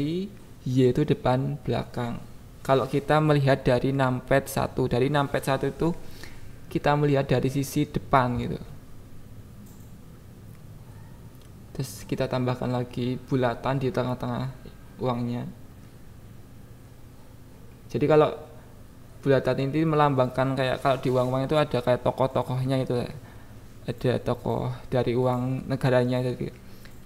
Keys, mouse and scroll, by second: 1.3 click, 1.7 click, 2.0 KP_1, 2.4 KP_7, 2.8 click, 3.2 Tab, 4.2 click, 4.9 shift+s, 5.5 shift+a, 7.1 s, 8.6 p, 9.8 Tab, 10.6 s, 10.9 click, 11.2 alt+z, 12.2 s, 13.2 click, 13.5 click, 14.1 g, 14.3 z, 14.6 click, 14.9 KP_7, 17.1 click, 17.4 click, 18.4 Tab, 18.9 a, 19.6 Tab, 20.7 click, 21.5 click, 22.7 click, 23.1 click, 23.4 click, 23.7 click, 23.9 click, 24.5 Tab, 25.2 f, 25.7 click, 26.5 g, 26.7 z.